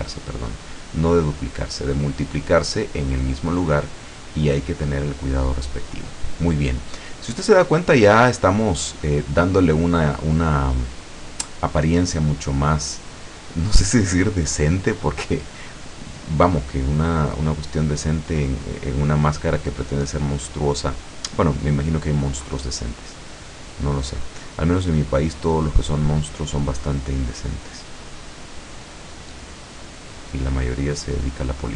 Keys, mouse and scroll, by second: 0.2-1.8 drag, 2.3-4.6 drag, 4.8-5.1 scroll down 2, 5.2 middle click, 5.7 middle click, 6.3-6.7 scroll up 1, 6.9-10.4 middle drag, 10.4 scroll up 1, 12.1-13.0 scroll up 3, 13.2 click, 14.1 click, 15.3 middle click, 16.7-19.5 drag, 19.8-21.6 drag, 21.8 middle click, 22.8 scroll down 1, 23.6-25.9 drag, 26.3-27.3 drag, 27.4 click, 28.3 click, 29.4 middle click, 30.1-30.6 scroll up 1, 30.9 scroll down 1.